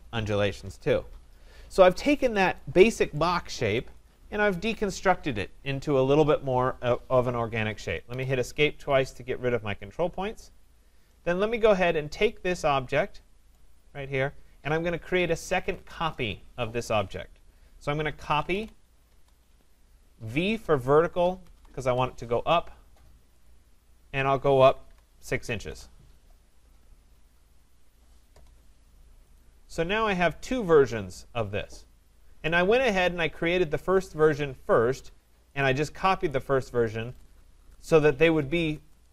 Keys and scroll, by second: 7.6 Escape, 19.0 Return, 25.6 Return.